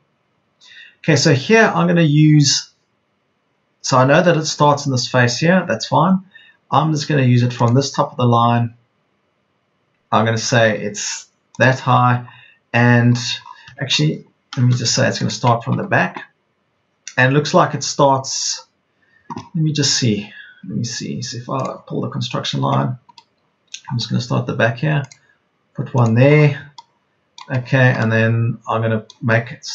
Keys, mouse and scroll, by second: 15.6 Delete, 20.8 Delete.